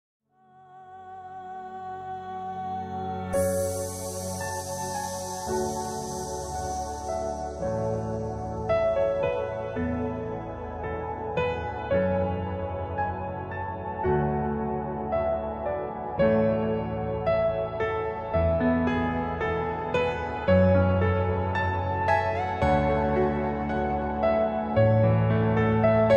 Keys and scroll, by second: 0.1 ctrl+z, 7.7 F3, 8.2 F2, 13.2 F2, 18.3 F4, 19.5 Escape, 22.4 c, 22.7 Escape, 22.9 F2, 24.0 Escape, 25.1 ctrl+z.